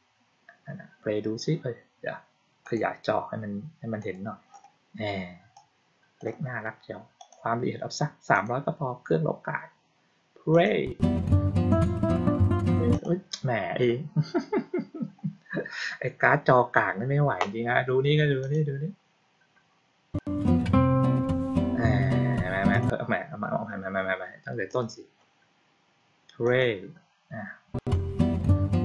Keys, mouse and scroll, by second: 2.5 click, 3.9 click, 5.4 click, 7.0 click, 8.2 click, 10.4 click, 12.8 click, 18.3 click, 22.6 click, 24.5 click, 26.3 click.